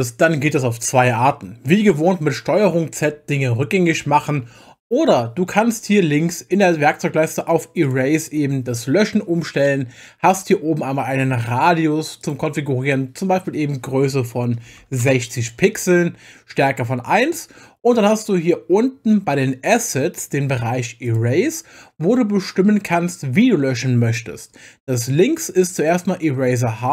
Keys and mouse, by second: 3.0 ctrl+z, 3.4 ctrl+z, 3.6 ctrl+z, 4.0 ctrl+z, 7.8 click, 12.2-15.0 drag, 21.1 click.